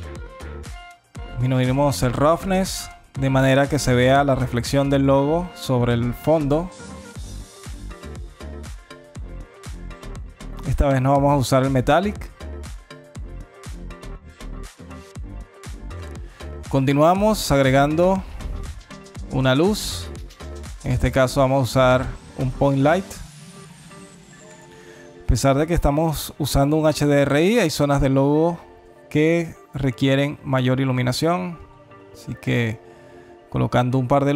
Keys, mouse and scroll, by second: 0.3 click, 7.1 click, 13.5-14.2 scroll down 3, 14.2-14.5 scroll down 3, 14.7 alt+click, 15.3 alt+middle click, 15.6 scroll down 2, 16.0 alt+click, 16.5 click, 16.8 shift+a, 21.6 KP_1, 22.8 g, 24.9 KP_7, 25.9 g.